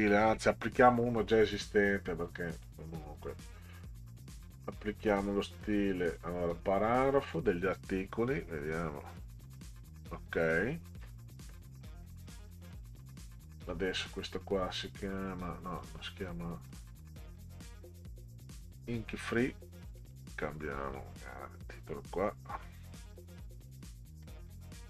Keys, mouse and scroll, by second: 2.5 click, 4.3 click, 6.0 click, 7.3 click, 11.6 scroll up 4, 12.8 click, 15.6 click, 15.9 click, 16.7 click, 20.0 click, 20.2 click, 21.0-22.6 drag, 23.7 click, 24.5-24.8 scroll down 6.